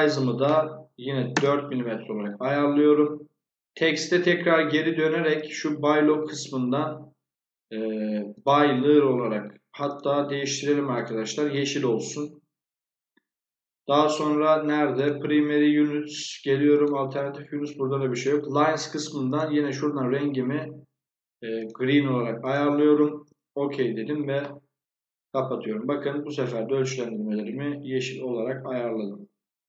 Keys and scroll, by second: 1.0 4, 1.2 Return.